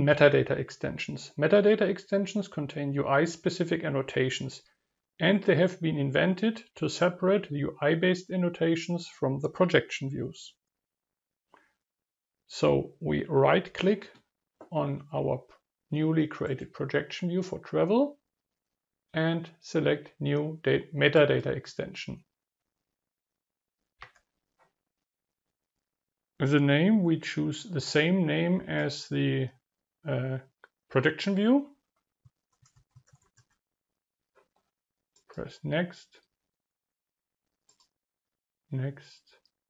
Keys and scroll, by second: 25.6 ctrl+v.